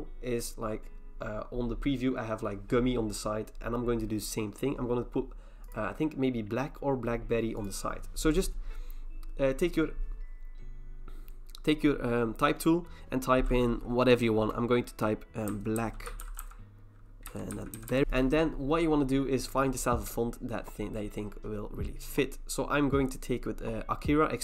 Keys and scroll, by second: 15.3-18.3 typing.